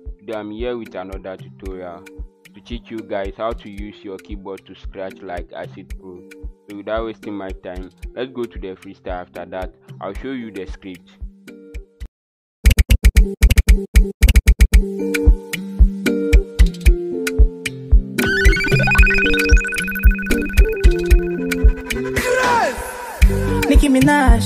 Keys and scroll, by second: 12.6-14.4 typing, 18.1 KP_9.